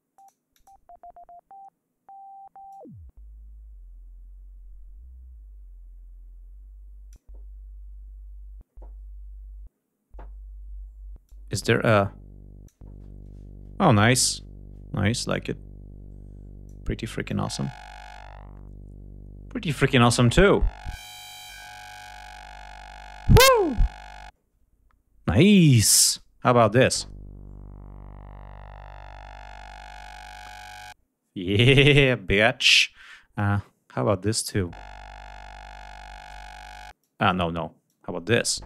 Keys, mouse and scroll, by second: 0.0 click, 0.3 click, 2.5-7.1 drag, 11.1-12.7 drag, 15.1-16.7 drag, 17.1-23.4 drag, 26.0 click, 33.2-34.5 drag, 36.8 click, 37.7 click.